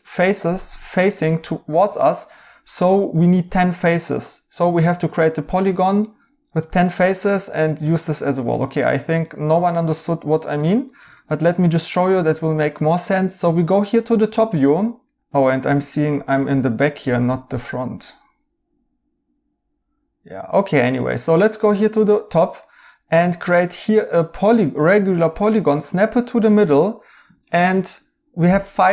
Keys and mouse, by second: 2.0 right click, 6.9 right click, 14.3 right click, 15.6 right click, 17.2 right click, 22.4 right click.